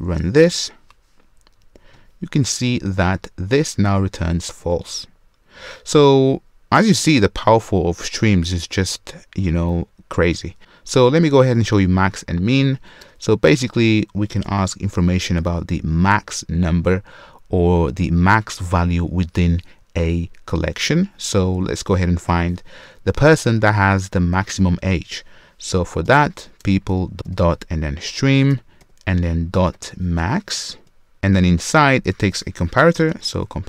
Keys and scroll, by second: 14.5 super+/, 26.6 Return, 31.1 Escape.